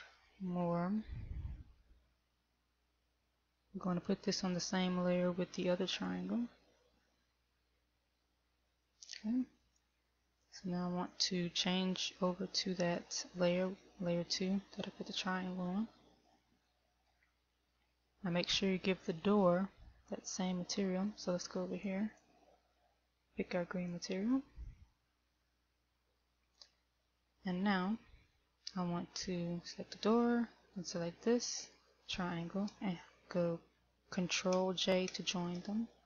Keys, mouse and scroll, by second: 4.0 m, 9.1 click, 10.1 click, 11.1 click, 15.1 middle click, 17.1 shift+middle click, 17.8-18.1 scroll up 2, 18.1 scroll down 2, 19.0 right click, 22.1 click, 30.1 right click, 31.1 shift+right click, 31.3 shift+right click, 32.1 shift+right click, 35.8 ctrl+j.